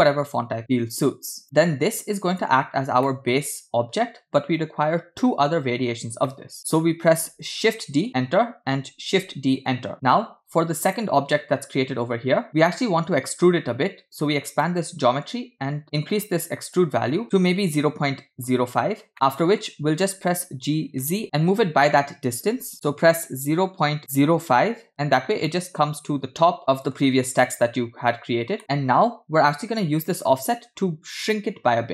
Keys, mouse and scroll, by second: 2.6-2.9 scroll up 2, 3.1 shift+middle drag, 3.4-4.1 scroll up 1, 4.1-5.7 scroll up 1, 6.3-7.2 middle drag, 7.7 shift+d, 9.4 shift+d, 10.9 click, 14.5 click, 18.8-19.1 scroll up 3, 19.1-19.8 middle drag, 20.4 g, 25.4-27.0 middle drag, 28.6 middle click.